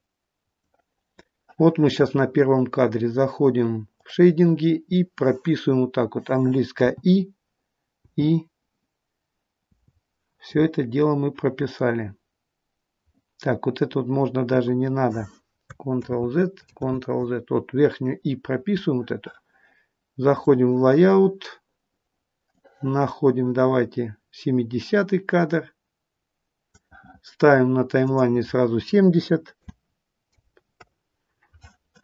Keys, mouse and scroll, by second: 20.6 click, 22.6 click, 27.9 click.